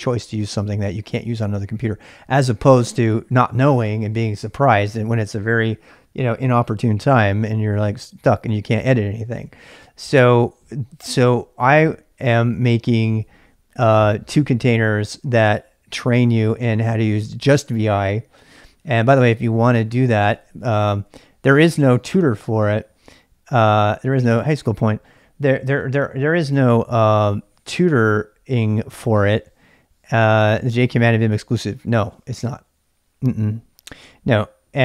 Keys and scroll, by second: 20.0-21.0 typing.